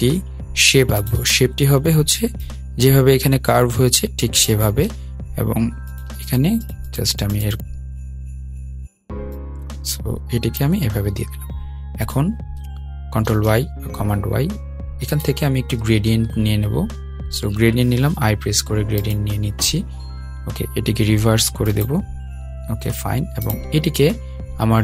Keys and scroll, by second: 12.8 super+y, 18.1 i.